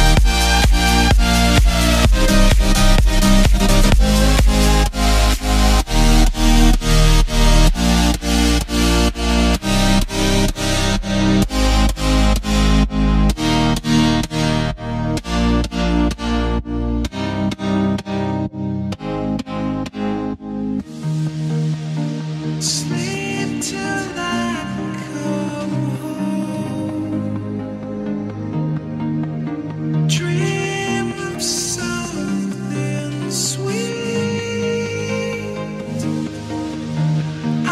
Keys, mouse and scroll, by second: 0.0-0.9 scroll up 1, 0.9 click, 1.6 shift+click, 2.4 shift+click, 6.5 click, 7.2 click, 9.4-14.3 middle drag, 14.3 click, 16.9 shift+click, 17.5 shift+click, 18.4-18.7 shift+drag, 18.9 shift+click, 20.7 Tab, 21.7 a, 23.0 u, 23.5 Tab, 24.1 click, 25.1 click, 27.0-37.7 drag.